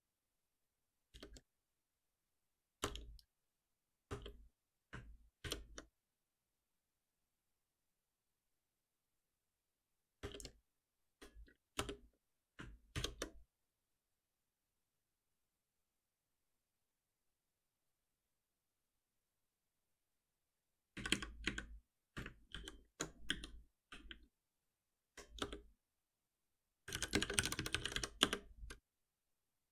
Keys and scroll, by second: 1.2 alt+Return, 5.4 shift+F10, 10.2 alt+Return, 12.9 alt+Return, 12.9 shift+F10, 18.1 ctrl+s, 20.8 ctrl+z, 22.5 ctrl+alt+shift+t, 25.4 ctrl+alt+shift+p.